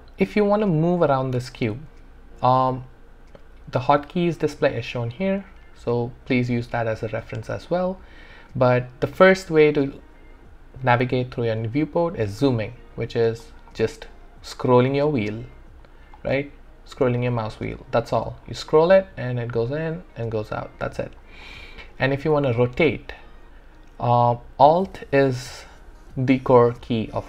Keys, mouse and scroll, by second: 7.9 click, 13.1-13.5 scroll up 1, 14.7-15.9 scroll down 1, 15.9 scroll up 1, 17.0-18.3 scroll down 1, 18.3 scroll up 1, 19.5 scroll down 1, 21.3 scroll up 1, 21.9-23.8 scroll down 1, 25.0-26.4 scroll down 1.